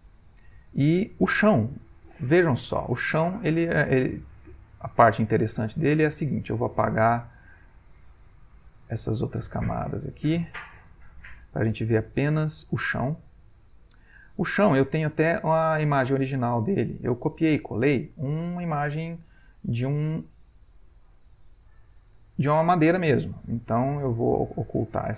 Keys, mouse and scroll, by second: 0.1 ctrl+middle click, 1.3 click, 3.2 click, 6.0-7.6 drag, 8.3 click, 8.6 click, 9.1 click, 9.8 click, 11.1 click, 12.5 click, 13.6-15.0 drag, 15.6 click, 16.5 ctrl+middle click, 17.3-18.1 ctrl+scroll up 1, 19.2 ctrl+middle click, 22.7 click, 24.3 click, 24.6 click, 25.0 click.